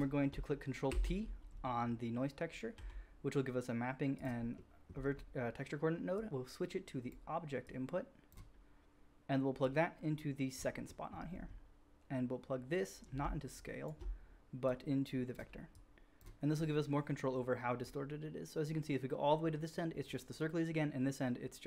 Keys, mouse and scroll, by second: 0.0 middle click, 0.2 ctrl+click, 1.0 ctrl+t, 1.0-2.5 middle drag, 3.2 g, 3.7-6.5 middle drag, 6.5-13.5 drag.